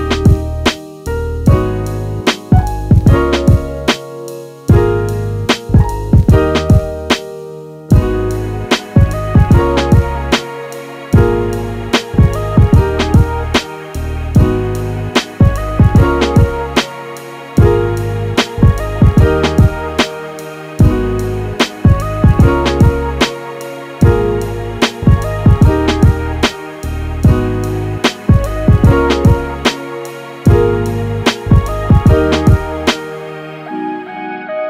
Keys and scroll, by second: 34.4 f.